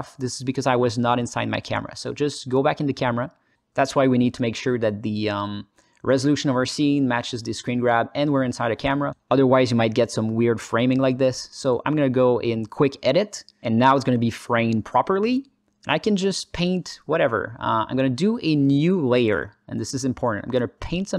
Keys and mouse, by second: 0.2 KP_0, 1.4-2.4 alt+drag, 2.7 ctrl+alt+click, 2.9 alt+middle click, 3.2 alt+shift+middle click, 5.3 click, 8.9 alt+middle click, 13.0-14.4 drag.